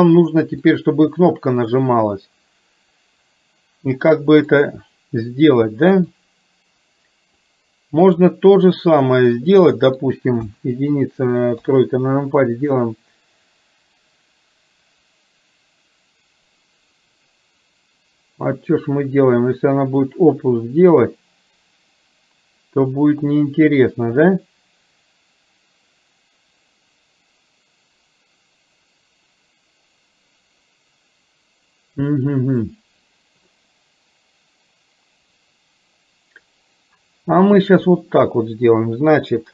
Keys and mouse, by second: 0.8-4.6 middle drag, 6.1-7.4 middle drag, 8.1 click, 9.5 middle click, 10.5 KP_1.